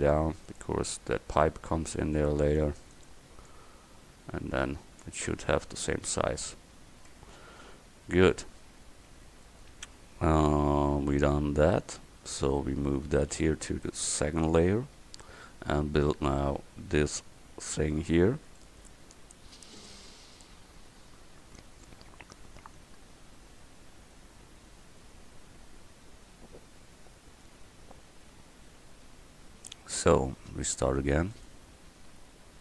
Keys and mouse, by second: 1.7 a, 2.1 c, 2.8 click, 7.2 Tab, 12.4-13.4 right drag, 13.4 m, 15.0-18.3 middle drag, 18.6 drag, 30.0-32.6 drag.